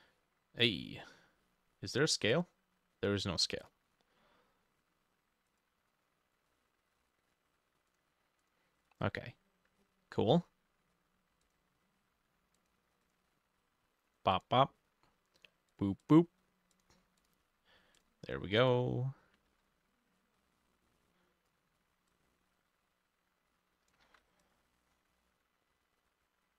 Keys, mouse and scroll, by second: 9.8-12.3 drag, 9.8-11.5 scroll up 7, 11.5-12.3 scroll up 1, 13.1-14.4 drag, 16.1 double click, 17.2 double click, 19.4 ctrl+middle click, 19.5 ctrl+d, 24.0 ctrl+middle click, 24.4 ctrl+d.